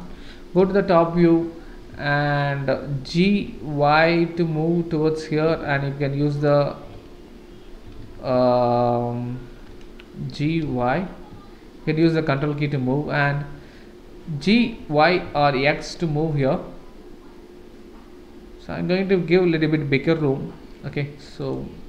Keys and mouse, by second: 0.6 KP_7, 2.1-2.4 shift+middle drag, 3.2 g, 7.8 g, 14.5 g.